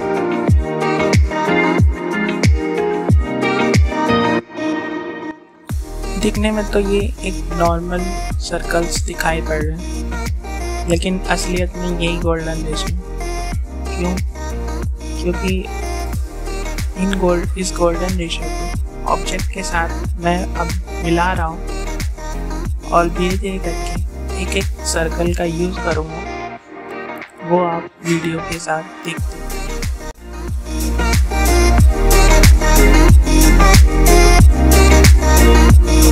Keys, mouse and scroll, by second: 0.6 space, 0.6 click, 0.8 space, 1.1 click, 1.3 space, 2.0 click, 3.2 ctrl+2, 4.2-5.7 drag, 5.7-10.7 drag, 14.7-15.8 alt+drag, 15.8 click, 16.8 ctrl+z, 18.5-21.6 drag, 21.6-32.2 alt+shift+drag, 32.2-36.1 alt+shift+drag.